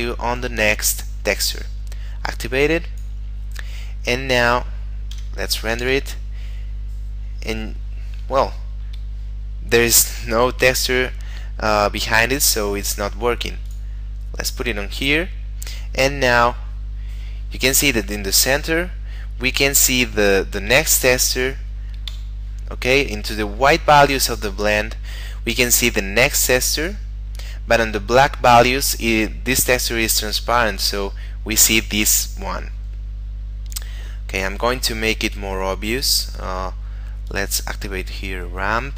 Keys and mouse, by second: 1.4 click, 5.2 F12, 8.9 Escape, 13.7 click, 16.3 F12, 22.1 Escape, 26.6 click, 30.8 click, 33.8 click, 35.2 middle click.